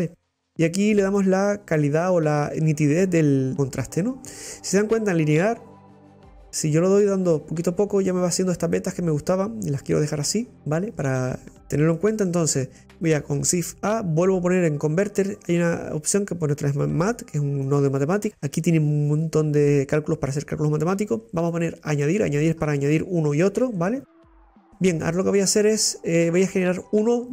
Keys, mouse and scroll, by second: 3.5 click, 4.2 scroll down 1, 4.3-5.9 middle drag, 5.9-8.7 drag, 8.7-17.8 middle drag, 18.1 scroll up 3, 18.2-21.5 middle drag, 21.5 click, 23.6-23.9 scroll down 9.